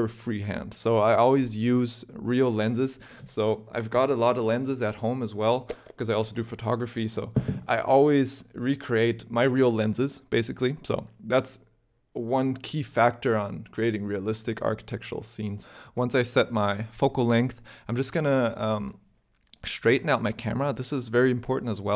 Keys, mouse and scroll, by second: 15.6 click, 16.5 shift+middle click, 17.1 scroll up 1, 17.4 shift+middle click, 18.8 shift+middle click, 20.0 click, 21.1 click.